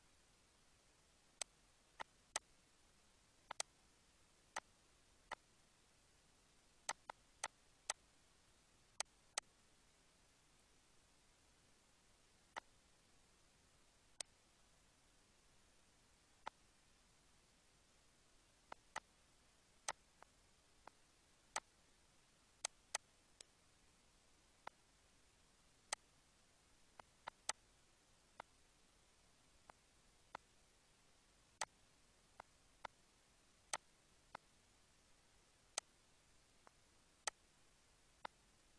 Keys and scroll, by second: 12.2 ctrl+d, 13.9 ctrl+d, 31.8 ctrl+a, 33.4 ctrl+c, 34.7 ctrl+v, 35.0 Return.